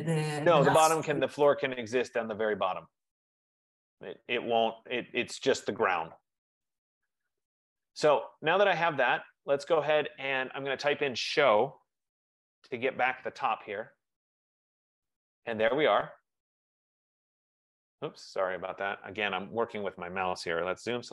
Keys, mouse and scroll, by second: 0.0 F15, 10.8-11.9 drag, 11.7-12.7 typing, 15.5 right click, 16.2 click, 17.1 Return, 17.2-18.3 scroll, 18.3 right click, 19.0 click, 20.1 click, 20.5-21.1 typing.